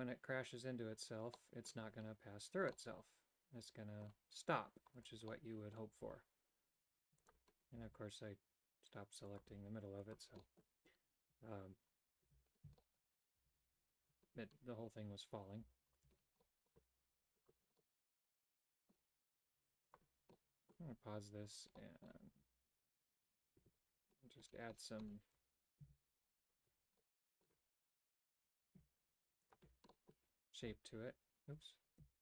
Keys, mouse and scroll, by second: 1.4 middle click, 2.9-4.2 middle drag, 5.1 right click, 5.4 middle click, 6.1 g, 7.8 a, 9.4 click, 10.0 click, 10.4 middle click, 10.5 typing, 12.1 alt+right click, 12.8 shift+middle click, 13.4 a, 14.0 alt+right click, 15.9 alt+right click, 16.4 middle click, 17.4 click, 17.8-19.0 middle drag, 19.9 click, 20.3 middle click, 21.6 right click, 22.4 g, 27.0 middle click, 29.4 click, 29.9 middle click, 30.6 h.